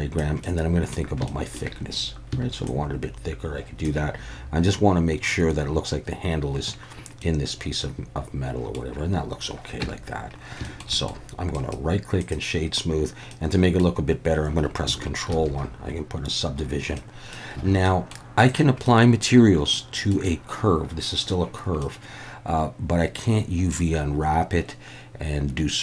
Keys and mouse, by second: 0.5 middle click, 1.3 shift+middle click, 2.6-3.8 shift+drag, 7.3-8.8 middle drag, 9.8 Tab, 10.6 shift+middle drag, 11.0 middle click, 11.6 right click, 13.3-13.8 middle drag, 15.3 ctrl+1, 17.0-17.4 middle drag, 17.7 alt+a, 17.8-18.1 middle drag, 18.5-18.9 drag, 18.9-20.1 middle drag, 21.8-25.8 middle drag.